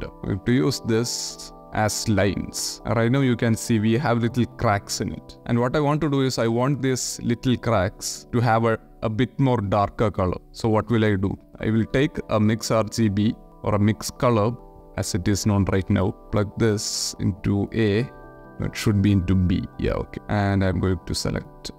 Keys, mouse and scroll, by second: 0.9 click, 1.3 shift+d, 1.6 click, 2.7-7.1 middle drag, 7.2 ctrl+shift+click, 7.3 ctrl+shift+middle click, 8.0 click, 9.2-10.8 middle drag, 11.3 shift+a, 15.2 click, 16.2 click, 17.8 shift+click, 18.4-18.9 drag, 19.4 shift+middle click, 19.9 click.